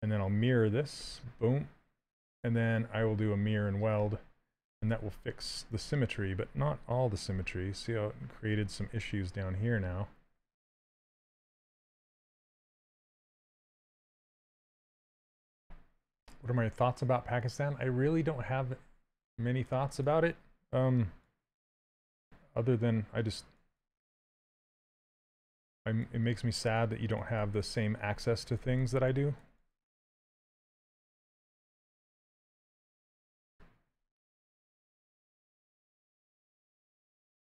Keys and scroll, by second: 31.2 x, 34.1 s.